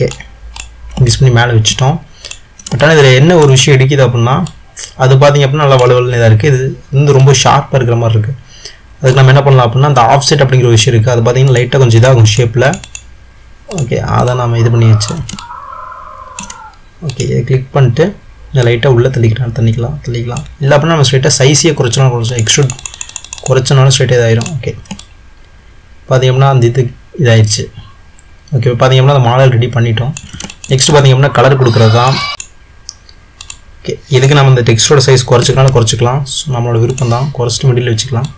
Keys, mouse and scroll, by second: 0.8 click, 1.2-2.3 middle drag, 2.3 click, 3.0-4.7 middle drag, 4.7 click, 7.3 click, 11.5-13.5 drag, 13.8 drag, 14.4-17.1 ctrl+middle drag, 17.1 click, 18.8 click, 22.4 click, 25.2-28.1 middle drag, 30.7-32.4 ctrl+middle drag, 32.4 s, 33.6 click, 34.2 drag, 35.6 s.